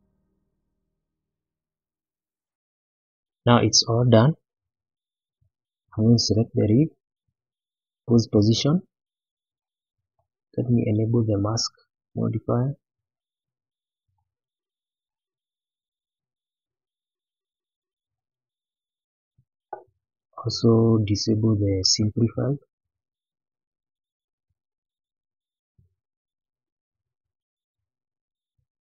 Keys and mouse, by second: 1.8-2.4 drag, 3.4-3.7 middle drag, 4.5 shift+middle drag, 6.9 click, 8.0 click, 8.9-9.2 middle drag, 9.8-10.1 middle drag, 11.5 click, 13.2 click, 14.4-15.0 middle drag, 15.5-16.1 middle drag, 16.7-17.3 middle drag, 17.9 shift+middle click, 18.6-19.3 middle drag, 21.6 click, 24.3-25.0 middle drag, 27.0 click, 28.6 click.